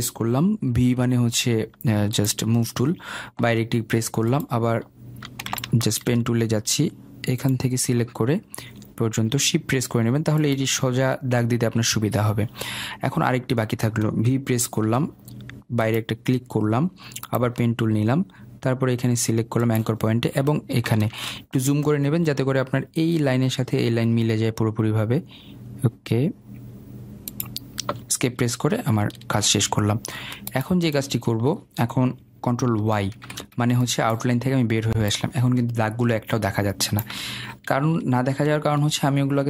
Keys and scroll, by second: 12.2 Escape, 28.9 Escape, 33.7 ctrl+y.